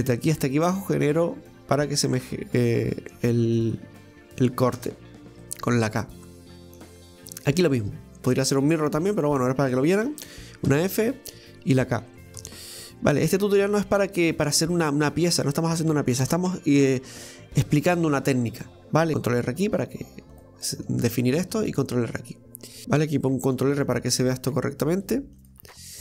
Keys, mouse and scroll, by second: 5.4-7.6 middle drag, 8.1 shift+right click, 8.5 shift+right click, 9.1 shift+right click, 9.7 shift+right click, 10.7 f, 18.6 middle click, 19.1 ctrl+r, 20.6 middle click, 21.4 ctrl+r, 25.9-26.0 scroll up 1.